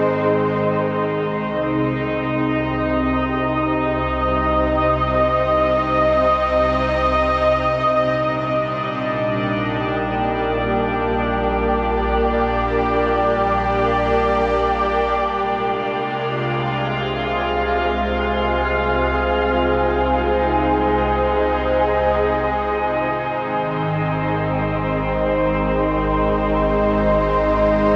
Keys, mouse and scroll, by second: 4.3-9.1 typing, 10.6 Return, 11.5-12.8 typing, 15.2 typing, 16.8-17.5 typing, 18.6-20.0 scroll down 1, 20.5 Return, 20.9 shift+d, 22.2-26.5 typing, 27.5-27.9 scroll down 1.